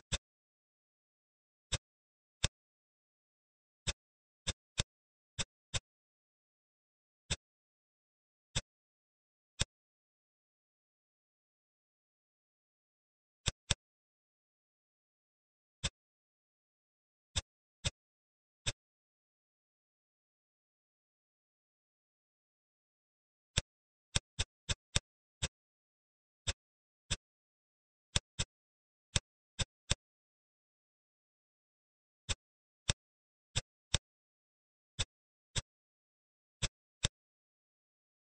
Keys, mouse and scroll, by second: 0.1 shift+click, 2.4 click, 3.8 click, 4.4 shift+click, 4.7 shift+click, 5.7 shift+click, 7.2 shift+click, 8.5-9.5 middle drag, 9.5 shift+click, 10.9 e, 13.7-15.2 middle drag, 15.7-17.5 drag, 17.8-20.2 middle drag, 23.5 click, 24.1 shift+click, 24.3 shift+click, 24.7 shift+click, 24.8 shift+click, 25.4-28.1 middle drag, 28.1 shift+click, 28.4 middle click, 29.5 shift+click, 29.9-31.4 middle drag, 32.3 shift+click, 32.8 shift+click, 33.5 shift+click, 33.8 shift+click, 35.0 click, 35.5-36.6 drag, 37.0-38.3 middle drag.